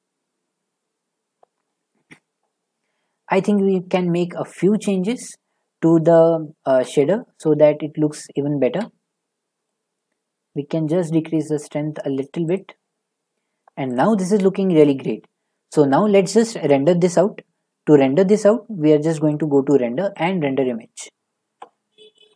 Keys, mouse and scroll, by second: 0.1 middle click, 3.6 click, 4.5 click, 6.7 shift+middle click, 7.7 click, 7.8 click, 7.9 click, 11.4 click, 12.5 click, 13.9 click.